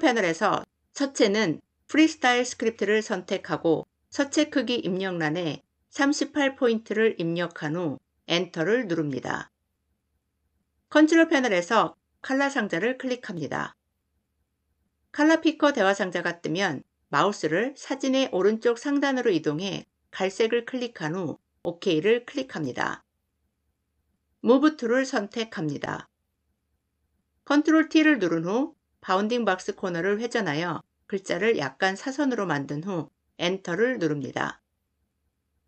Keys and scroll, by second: 8.1 Return, 24.4 v, 27.5 ctrl+t, 33.4 Return.